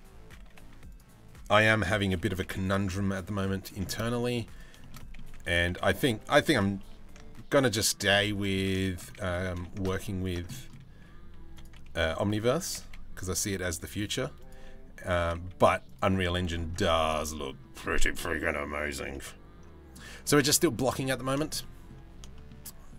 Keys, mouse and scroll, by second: 0.2 z, 1.5 g, 3.5 middle click, 3.9 z, 4.4 shift+middle click, 4.6 middle click, 5.1 s, 6.1 s, 7.7 middle click, 8.4 shift+middle click, 8.7 middle click, 9.0 g, 10.1 middle click, 11.1 2, 11.1 click, 12.3 g, 13.4 z, 14.1 click, 14.6 g, 15.6 z, 16.3 middle click, 17.3 Tab, 18.6 Tab, 18.7 middle click, 19.7 middle click, 21.0 shift+middle click, 21.2 middle click, 21.9 shift+middle click, 22.2 middle click.